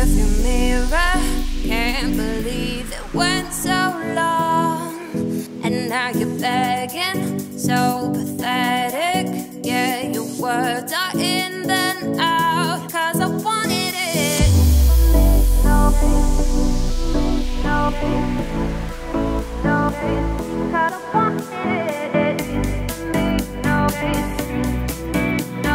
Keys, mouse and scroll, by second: 0.3-1.6 middle drag, 1.6-2.0 scroll up 2, 2.0-2.7 middle drag, 2.7 Tab, 3.0-3.6 scroll down 2, 3.6 click, 4.8-8.7 shift+middle drag, 8.7 Tab, 9.5 shift+d, 11.7 h, 12.0 click, 12.3 Tab, 12.7 scroll up 1, 12.9 a, 13.8 shift+middle click, 14.1-15.3 scroll up 1, 15.3 scroll down 2, 15.3 middle click, 15.9-16.6 scroll up 2, 16.6 g, 19.1-19.8 scroll up 1, 19.8 g, 21.5-21.9 scroll down 1, 21.9 middle click, 22.6 i, 25.2 i.